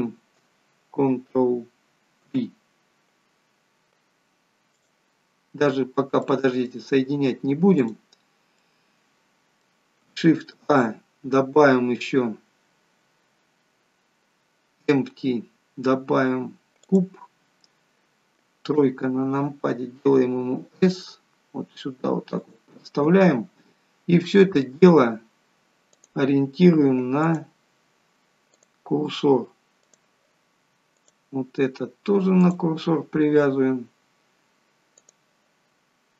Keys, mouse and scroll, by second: 5.7-6.3 scroll down 1, 6.3 middle click, 7.0 scroll up 2, 7.9 click, 8.3 scroll down 1, 8.7 middle click, 10.5 shift+a, 18.8 KP_3, 20.0 s, 24.5 click, 27.3 click, 30.1 click, 31.1 click, 35.1 click.